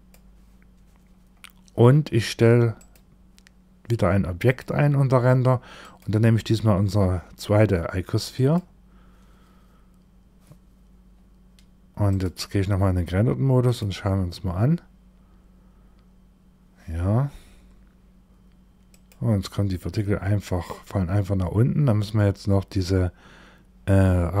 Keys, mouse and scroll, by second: 0.7-2.3 scroll up 11, 2.3 click, 5.3 click, 11.6 click, 13.1 click, 18.4 click, 19.3-21.1 scroll up 7, 21.1-21.9 scroll up 4, 21.9-22.7 scroll down 2, 22.7-23.3 scroll down 1, 23.3-24.4 scroll down 5.